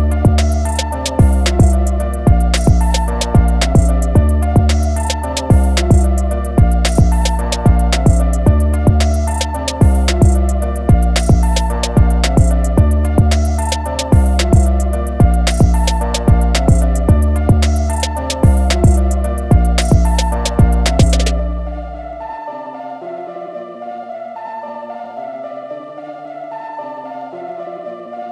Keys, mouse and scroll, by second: 0.8 ctrl+a, 2.2 click, 4.5-5.0 typing, 5.9 click, 7.1 ctrl+click, 8.6 ctrl+z, 9.9 alt+click, 12.1 click, 15.7 i, 16.8 click, 24.4 a, 24.6 click, 27.0 click.